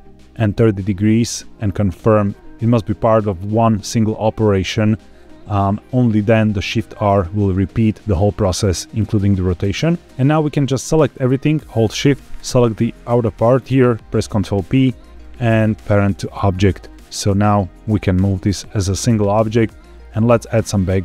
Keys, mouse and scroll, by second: 10.0 shift+middle click, 10.0 scroll up 1, 10.4 click, 12.3 shift+click, 14.2 ctrl+p, 16.0-16.9 drag, 17.4-17.8 scroll down 2, 17.8 g, 18.4 Escape, 19.9 middle click.